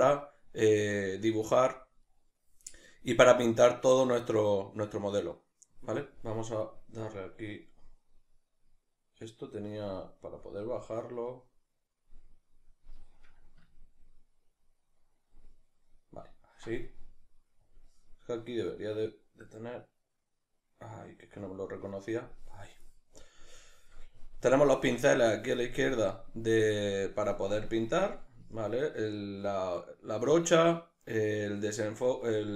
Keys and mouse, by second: 7.2-13.8 drag, 13.8-17.6 ctrl+middle drag, 17.6-26.6 drag, 26.6 middle click, 27.6-32.5 drag.